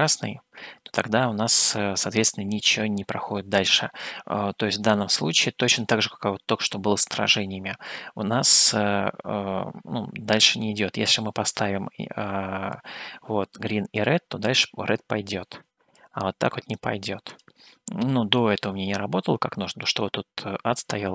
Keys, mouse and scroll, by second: 11.4 click, 17.5 click.